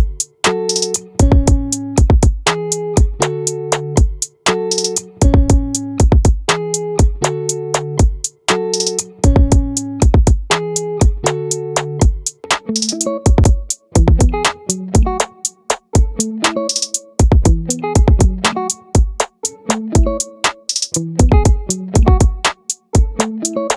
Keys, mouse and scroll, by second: 4.2-5.9 drag, 11.3-12.7 drag, 12.7-13.9 middle drag, 17.9 ctrl+r, 21.3 right click, 23.1-23.7 middle drag.